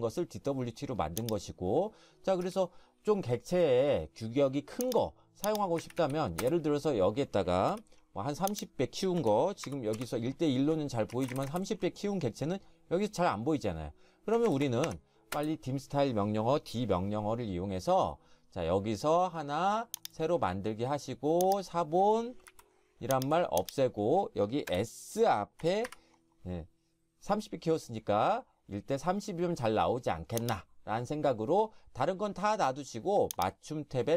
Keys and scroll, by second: 2.4 Escape, 5.6-6.5 typing, 7.7 F3, 9.2-9.6 typing, 10.0 Return, 11.1-11.4 typing, 14.4-15.4 typing, 22.4 Delete, 24.7-26.3 typing.